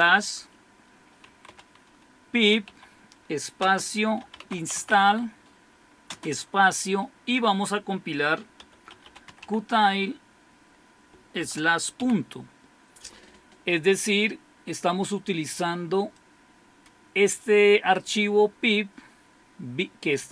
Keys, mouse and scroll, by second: 1.2 typing, 2.6 typing, 3.7-6.1 typing, 8.4-9.9 typing, 11.4-12.0 typing, 16.1-18.0 drag.